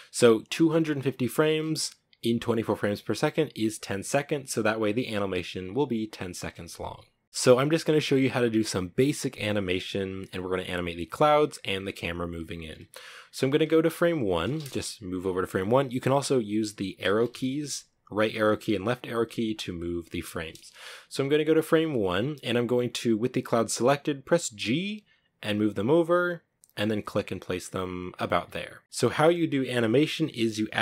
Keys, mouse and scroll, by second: 2.7 scroll up 1, 3.4 scroll up 1, 7.2 space, 12.7-16.1 drag, 16.1 Right, 16.2 Left, 16.3 Right, 16.5 Left, 16.5-17.2 Right, 17.5 Left, 18.0 Right, 18.2 Right, 18.5 Left, 19.3 Left, 23.8 g.